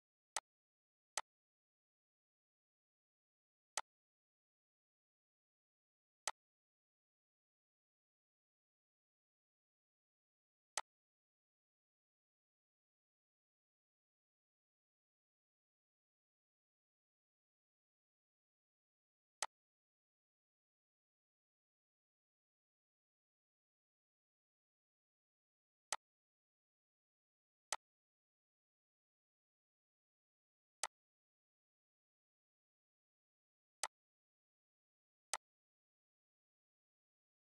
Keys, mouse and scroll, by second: 2.4 right click, 3.8 click, 5.9 typing, 6.2-13.6 drag, 19.4-23.5 drag, 19.4 typing, 25.9 click, 25.9 typing, 28.9 ctrl+;, 30.8 click, 33.5 click, 33.8-35.3 shift+drag.